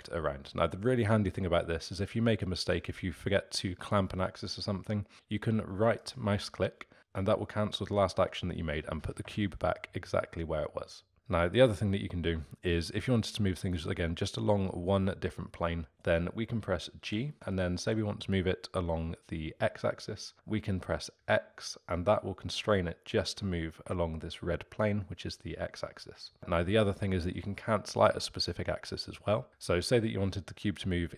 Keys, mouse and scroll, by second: 17.0 g.